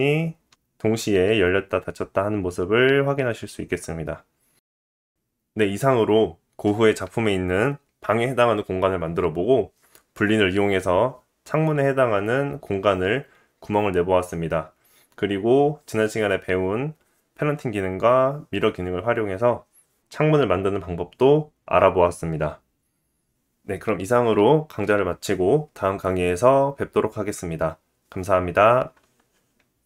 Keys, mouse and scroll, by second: 0.1 r.